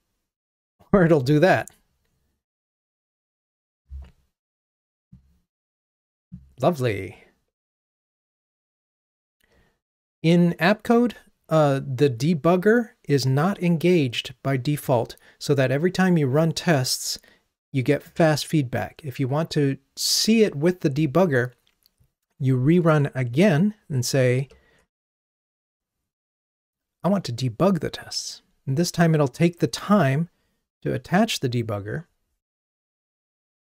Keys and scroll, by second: 24.4 ctrl+d.